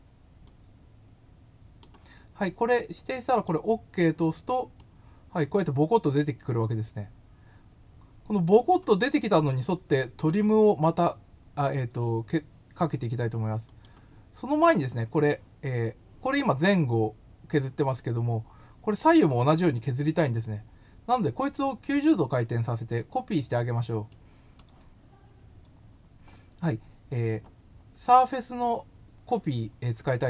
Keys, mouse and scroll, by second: 0.4-1.8 drag, 3.3 click, 4.7-8.6 middle drag, 9.4 middle click, 13.6 click, 14.4 scroll up 1, 24.0 middle click, 25.1 scroll up 1, 27.6 scroll up 1.